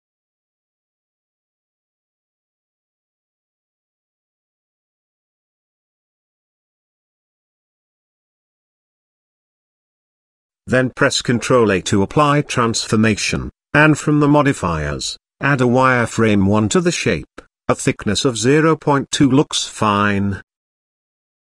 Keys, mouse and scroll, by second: 0.0 g, 2.3 middle click, 3.4 shift+scroll up 1, 3.9 Tab, 5.4 shift+middle drag, 6.9-7.3 middle drag, 8.5-9.7 drag, 10.2 middle click, 11.2 ctrl+z, 12.1 ctrl+a, 13.3-15.4 drag, 15.8 shift+middle click, 16.3 middle click, 16.8 shift+middle click, 18.1-19.2 drag, 19.6 middle click, 20.9 click.